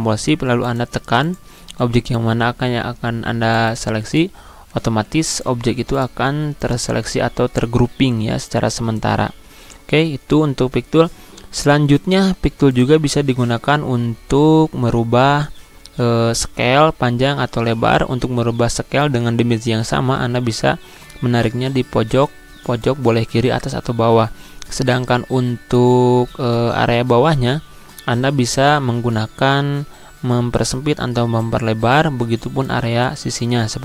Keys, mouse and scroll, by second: 0.4 shift+click, 1.0-11.7 shift+drag, 18.7 click, 18.8-25.5 drag, 25.5-33.8 drag.